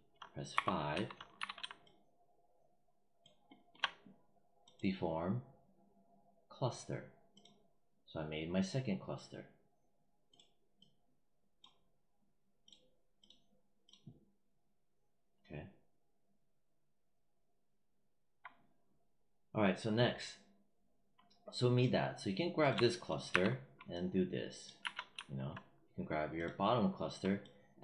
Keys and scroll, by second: 0.4 5, 1.2 w, 23.2 w, 24.7 z.